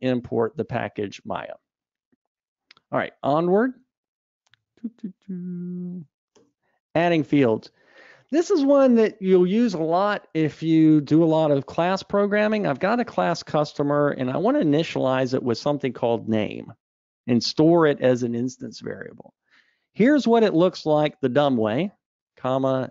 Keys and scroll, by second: 3.3 alt+Up, 5.0 super+Up.